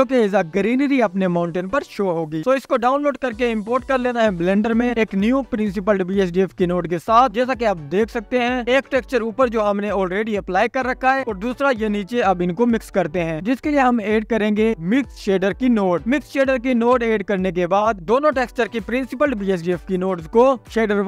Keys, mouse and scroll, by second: 1.1 scroll up 5, 3.8 click, 3.9-4.4 scroll up 1, 4.4-4.9 scroll down 1, 4.9-5.7 scroll up 1, 5.7-6.3 scroll down 1, 6.3 click, 7.1 ctrl+v, 12.1-17.5 drag, 19.2-20.6 drag.